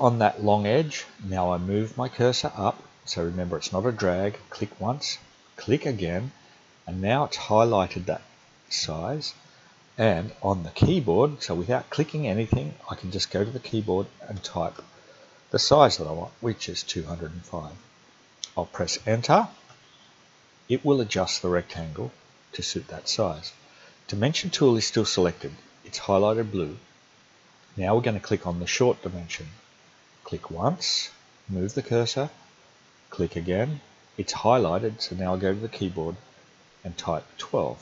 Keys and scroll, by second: 14.4-15.7 typing, 19.7 Return, 36.8-37.7 typing.